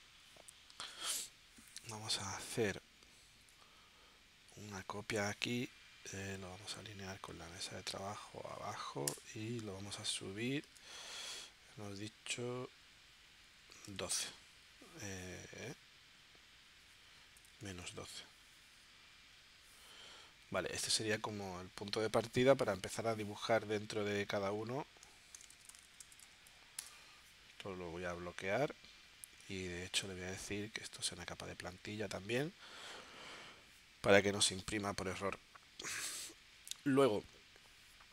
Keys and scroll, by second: 9.1 Return, 10.6 Tab, 13.2 1, 17.4 space, 25.5 shift+c, 26.8 Return.